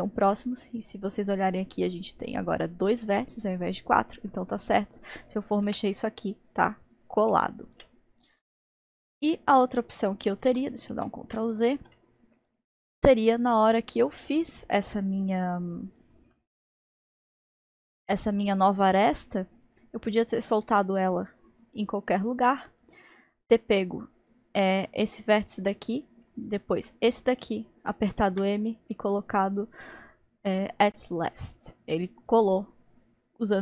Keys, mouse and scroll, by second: 4.7 click, 5.8 g, 8.8 alt+z, 9.3-10.5 middle drag, 10.5 ctrl+z, 10.9 ctrl+z, 12.0-13.8 middle drag, 13.8 click, 14.2-15.9 middle drag, 15.9 click, 17.0 g, 22.7 click, 24.2 click, 26.6 shift+click, 28.4 m.